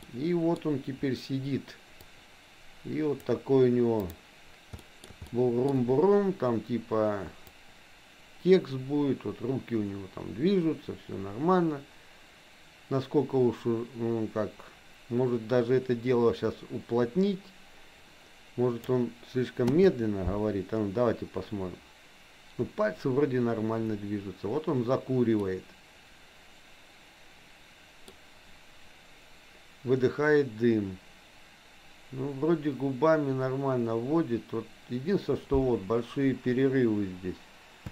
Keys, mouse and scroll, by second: 0.0 middle click, 2.2-3.4 drag, 4.9 shift+middle click, 5.2 middle click, 7.6-19.0 drag, 19.7 space, 25.5-28.2 middle drag.